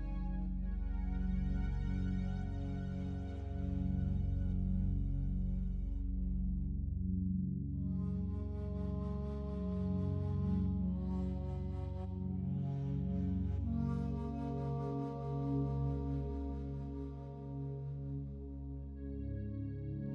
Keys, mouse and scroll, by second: 3.3 w, 4.1 click, 5.4 w, 6.1 click, 11.0 right click, 11.8 shift+right click, 16.8 shift+right click.